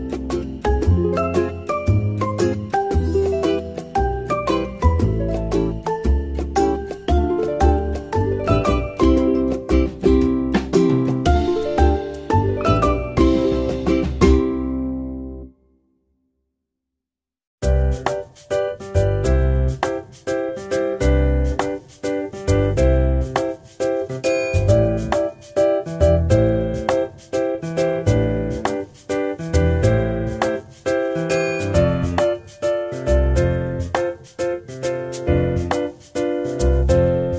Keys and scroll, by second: 1.2 ctrl+z, 5.4 ctrl+z, 7.9 ctrl+z, 11.4 Tab, 17.6 ctrl+z, 26.6 Tab.